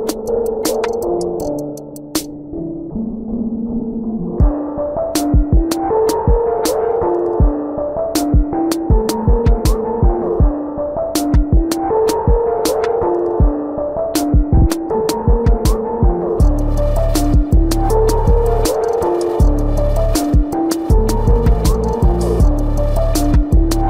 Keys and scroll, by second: 1.1 ctrl+alt+z, 17.1 ctrl+alt+z.